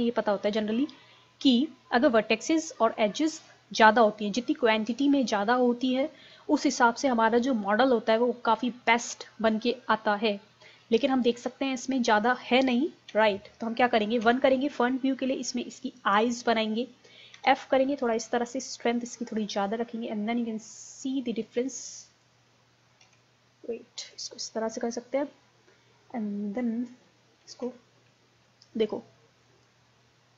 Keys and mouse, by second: 13.1 z, 14.3 KP_1, 17.4 f, 18.1-23.1 drag, 23.1 ctrl+z, 25.7-27.6 middle drag, 27.6 ctrl+z, 29.3 middle click, 29.7-30.3 drag.